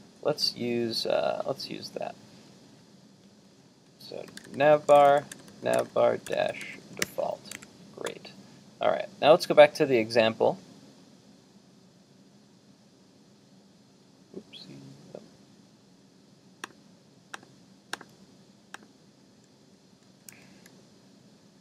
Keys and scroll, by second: 7.6 super+Tab.